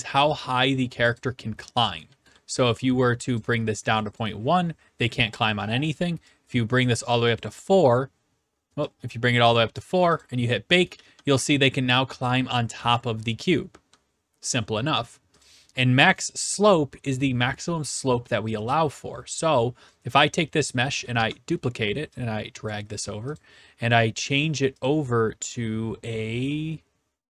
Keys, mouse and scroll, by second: 1.2 click, 2.1 d, 2.3 right click, 3.4 click, 4.2 click, 6.8 click, 7.4 click, 9.5 click, 10.2 click, 10.7-13.9 typing, 11.9-13.0 right drag, 13.5-14.6 right drag, 15.4 click, 16.3-16.9 s, 17.0 right click, 19.0 click, 21.1 ctrl+d, 22.7 click, 23.3 click, 25.1 click.